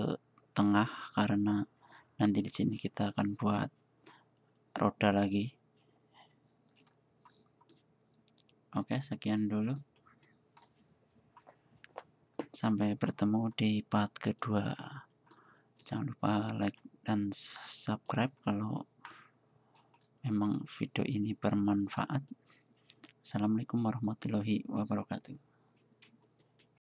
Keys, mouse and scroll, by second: 6.9-8.0 middle drag, 8.0 middle click, 8.3 middle click, 8.5 middle drag, 9.1-9.6 middle drag, 9.9 middle drag, 11.4 middle click, 13.6 middle click, 14.1 middle click, 18.5 middle click, 19.2 middle click, 19.5 middle click, 19.7-24.8 middle drag.